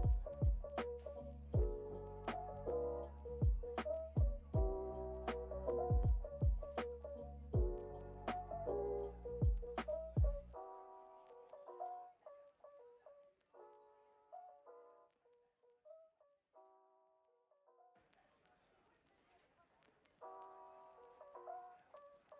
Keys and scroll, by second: 8.2 o.